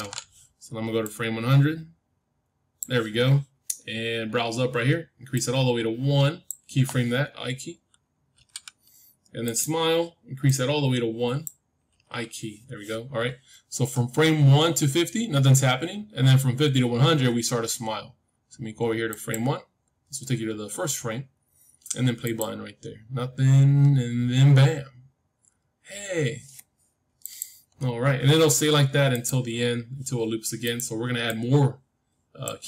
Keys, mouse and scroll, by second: 1.0-3.0 drag, 5.2-7.3 drag, 8.3 i, 9.4-12.6 drag, 11.8 i, 19.0-21.1 drag, 22.2-24.2 drag, 27.1-32.6 drag.